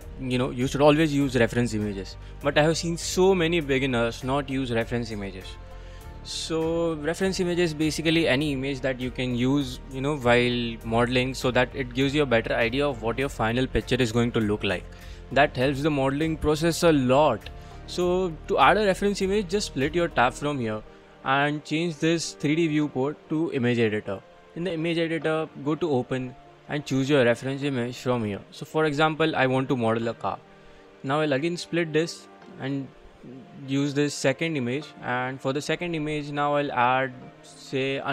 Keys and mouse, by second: 0.0-2.3 middle drag, 11.4-12.3 middle drag, 12.3-12.8 middle drag, 18.6-21.2 drag, 22.3-23.6 drag, 25.8 click, 32.5-33.5 drag, 35.6 middle click, 37.5 middle click.